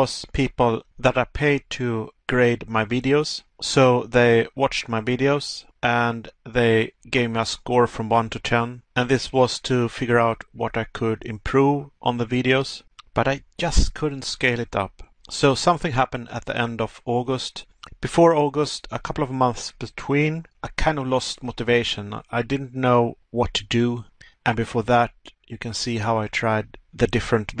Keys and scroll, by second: 1.5 Pause, 3.5 Pause, 6.4 Pause, 10.1 Pause, 14.3 Pause, 16.5 Pause, 19.0 Pause, 20.2 Pause.